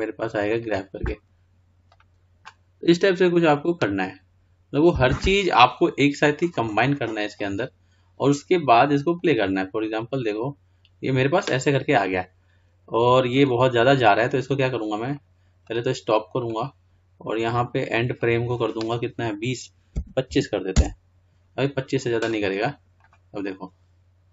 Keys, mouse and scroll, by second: 6.7-12.1 drag, 14.2-22.8 drag, 23.3 click.